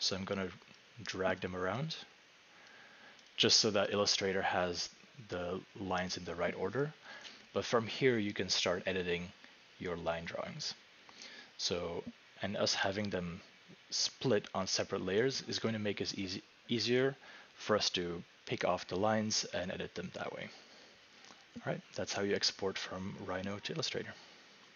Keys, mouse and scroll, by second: 0.8 click, 1.4 click, 2.7 click, 3.3 click, 24.7 click.